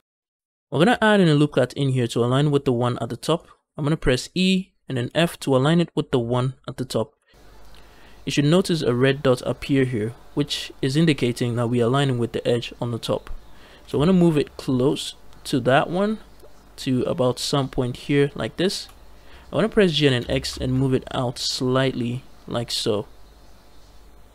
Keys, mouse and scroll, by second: 0.0 n, 0.6 ctrl+r, 4.2 e, 4.9 f, 18.4 shift+click, 19.8 g, 20.0 x, 24.2 shift+click.